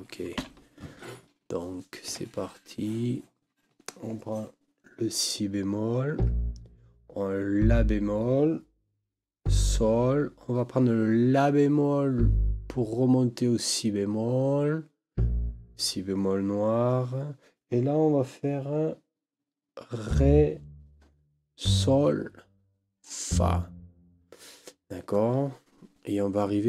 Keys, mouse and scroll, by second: 0.4 n, 2.1 KP_5.